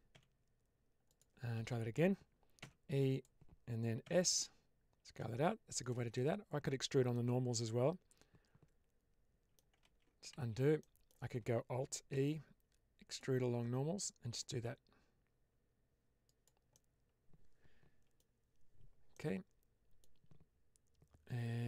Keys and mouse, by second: 0.0 s, 1.5 ctrl+z, 2.5 e, 3.9 s, 6.0-7.0 middle drag, 7.4-9.5 middle drag, 9.9 ctrl+z, 10.3 ctrl+z, 10.7 middle click, 12.0 alt+e, 16.1 click, 16.6-18.1 middle drag, 19.0 middle click.